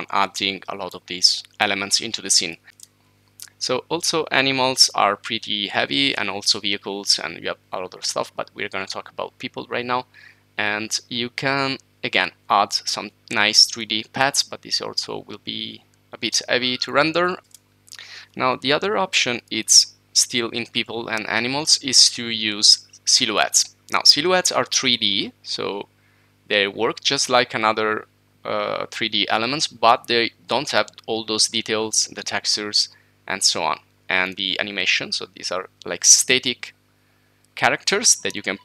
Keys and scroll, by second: 2.0-3.6 typing, 5.0-5.7 typing, 17.2-18.2 typing, 19.6-20.4 typing.